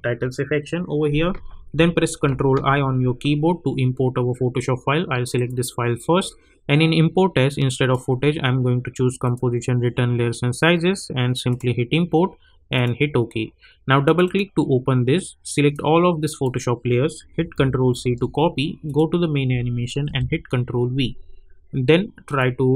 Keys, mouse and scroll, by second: 2.2 ctrl+i, 5.3 click, 8.9 click, 11.5-17.9 drag, 17.9 ctrl+c, 18.8 click, 20.0 ctrl+v, 22.3-22.7 drag.